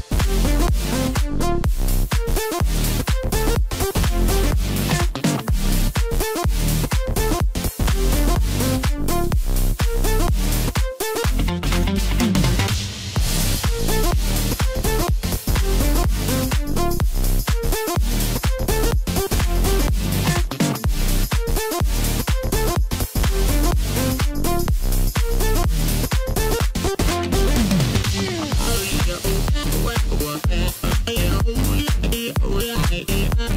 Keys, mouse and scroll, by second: 2.1-3.6 middle drag, 3.6-4.6 scroll up 1, 4.6 click, 5.1 click, 5.3 click, 6.2 KP_1, 6.9 scroll up 3, 7.7 e, 9.7 middle click, 10.3 scroll down 2, 10.8-12.8 middle drag, 12.8 shift+click, 13.9 shift+click, 15.2 shift+click, 17.0 KP_1, 18.5 e, 20.7-21.9 middle drag, 21.9 click, 26.9 KP_7, 28.7 shift+click, 29.7 shift+click, 30.4 KP_1, 31.7 e, 33.3 middle click.